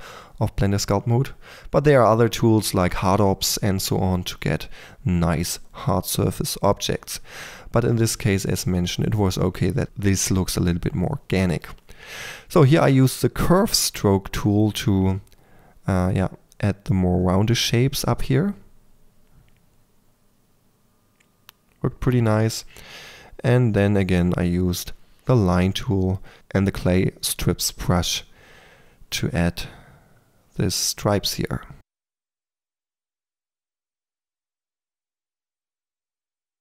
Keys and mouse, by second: 0.4 click, 1.4 click, 2.1-3.2 drag, 3.2 f, 3.4 f, 3.8 click, 3.8 f, 4.5-5.6 drag, 5.6 f, 6.0-6.6 drag, 7.3 click, 8.1-8.8 drag, 8.9-9.4 drag, 10.3 click, 10.5 middle click, 10.7 click, 10.9 k, 11.0 f, 11.3 3, 11.4 f, 11.6 click, 12.1-13.9 drag, 13.1 Return, 13.3-15.7 typing, 17.5 shift+Return, 19.9-20.6 drag, 20.7 Return, 21.3 f, 21.8 click, 22.0 f, 22.2 drag, 22.5 middle click, 22.8 f, 23.0 f, 24.1-24.5 drag, 25.1 f, 25.5 click, 25.8 click, 26.9 click, 27.7 click, 28.0 click, 28.6 click, 29.5 drag, 29.9-30.8 drag, 31.1 middle click, 31.3 click, 31.8 click, 32.2 middle click, 32.5 drag, 32.8 middle click, 33.2 click, 33.5 middle drag, 33.9 click, 36.1-36.6 drag.